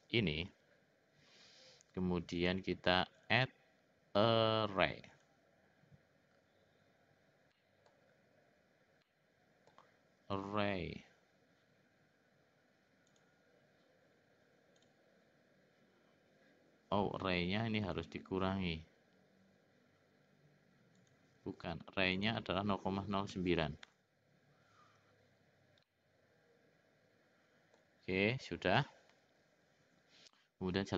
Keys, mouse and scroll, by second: 3.1-5.6 drag, 7.5 middle click, 9.1 middle click, 13.4 click, 14.8 click, 17.9 click, 21.0-25.1 drag, 25.8-27.8 middle drag.